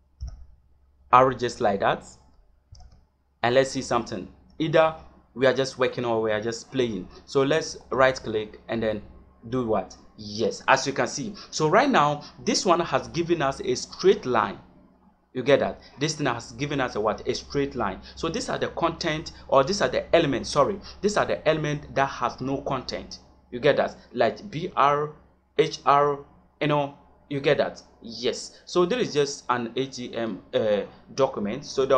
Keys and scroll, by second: 2.6 shift+..